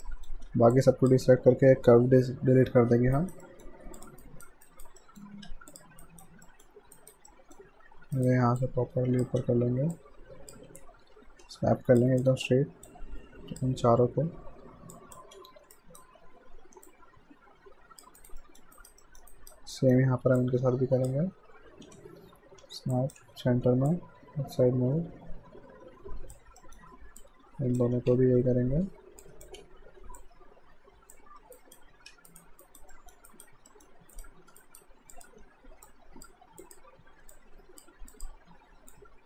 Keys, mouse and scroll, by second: 0.0 alt+middle click, 0.7 ctrl+click, 3.2 right click, 3.4 middle click, 4.0 click, 4.2 right click, 5.0 middle click, 5.5 q, 5.7 click, 6.0 right click, 6.5 alt+middle click, 7.0 alt+right click, 7.3 alt+middle click, 8.2 right click, 8.6 click, 9.4 w, 10.0 click, 10.7 typing, 11.9-12.4 typing, 12.0 click, 12.9 click, 13.8-16.2 typing, 15.7 alt+right click, 16.9 click, 18.2 alt+right click, 18.4 alt+middle click, 18.8 alt+right click, 19.0 alt+middle click, 19.3 alt+right click, 19.8 alt+middle click, 20.4 click, 21.9-24.0 typing, 22.9 click, 23.9 click, 26.6 alt+middle click, 27.2 click, 28.0 typing, 29.1-30.4 typing, 29.2 click, 30.2 click, 31.6 alt+right click, 32.3 right click, 32.6 alt+right click, 32.9 alt+middle click, 33.3 alt+right click, 33.7 alt+middle click, 34.2 right click, 34.6 alt+right click, 35.1 click, 35.4 w, 35.9 click.